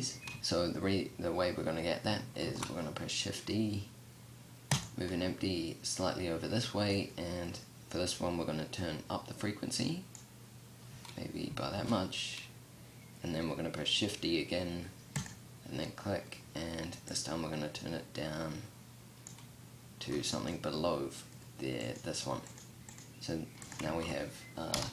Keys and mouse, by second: 1.9 shift+d, 11.2 shift+d, 19.5-20.2 middle drag, 23.3 ctrl+z, 24.1 KP_0.